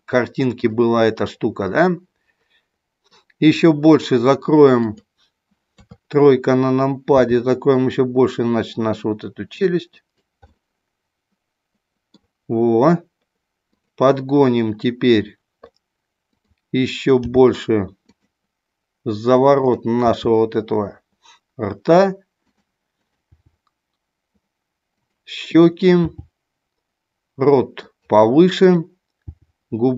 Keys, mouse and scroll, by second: 0.5 click, 1.8-3.2 middle drag, 4.8 click, 5.6 KP_3, 7.0 r, 9.9 click, 10.4-12.2 middle drag, 13.7 click, 16.3 click, 17.2 g, 18.0 click, 19.6 click, 20.0 g, 22.4 click, 23.0 click, 23.6 g, 25.6 click, 26.1 g, 29.1 g.